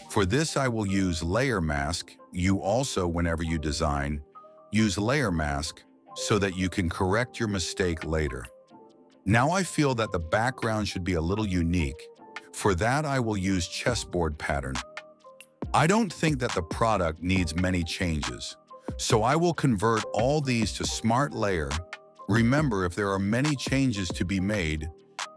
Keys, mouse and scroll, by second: 4.3 click, 6.6 click, 7.6 click, 8.6 click, 10.0-12.3 drag, 19.1 ctrl+d, 19.8 right click, 21.4 click, 22.6 right click, 24.5 click.